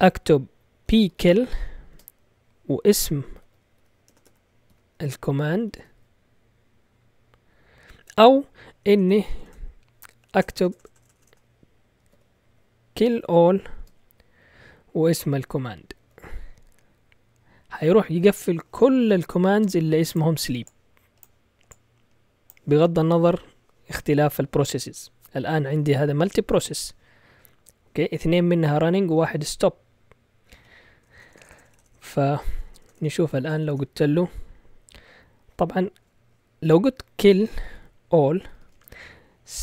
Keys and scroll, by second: 0.6-6.3 typing, 8.8-10.4 typing, 11.7-14.1 typing, 15.2-16.6 typing, 31.0-32.5 typing, 37.1-39.6 typing.